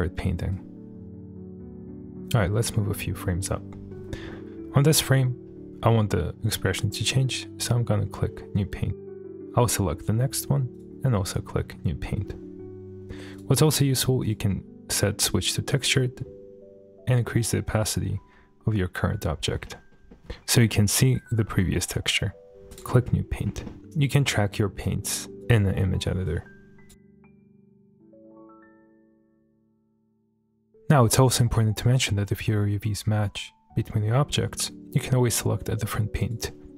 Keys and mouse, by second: 0.5 click, 1.4 click, 2.3 click, 4.9 middle click, 7.6-8.0 drag, 8.7 click, 9.3 click, 9.4 shift+middle click, 10.7-11.2 drag, 13.3 click, 14.2 click, 14.9 middle click, 16.0-17.9 drag, 19.6 middle click, 20.1 shift+middle click, 22.7-23.2 drag, 23.7 shift+middle click, 24.0 shift+middle click, 24.8 click, 26.2 click, 27.1 click, 27.6 middle click, 27.7 click, 27.7 shift+middle click, 27.9 click, 28.4 click, 28.6 click, 29.2 click, 29.3 ctrl+z, 29.4 click, 29.5 click, 29.7 click, 30.6 middle click, 36.2 click.